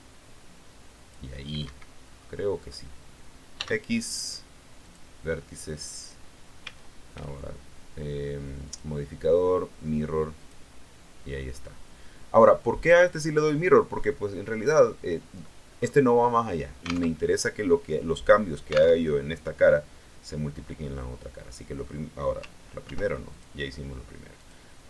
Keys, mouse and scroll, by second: 1.5 Escape, 2.0-2.4 scroll down 1, 2.6 scroll up 1, 3.4 x, 4.7 click, 6.5 a, 8.6 click, 10.3 click, 12.3-13.5 middle drag, 13.8 middle click, 14.0 scroll up 1, 15.1-15.6 scroll down 1, 15.6-16.0 scroll up 1, 17.0 alt+Tab, 18.9 alt+Tab, 20.7-22.0 middle drag, 22.8 ctrl+r, 23.2 ctrl+click, 24.3 click.